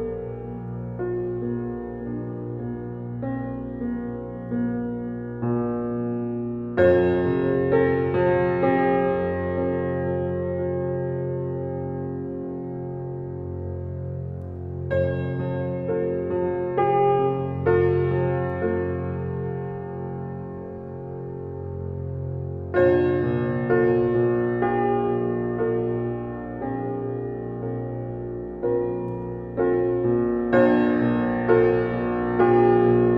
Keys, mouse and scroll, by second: 0.6 s, 2.7 click, 5.2 click, 6.2 KP_0, 7.8 click, 10.0 g, 14.9 drag, 15.7 drag, 19.3 click, 21.7 click, 22.6 shift+a, 27.3-30.2 middle drag, 30.2 scroll up 4, 30.5-30.8 shift+middle drag, 30.8 scroll up 1, 31.6-31.9 alt+middle drag, 31.9 scroll down 2, 32.1 shift+middle click, 32.8 click.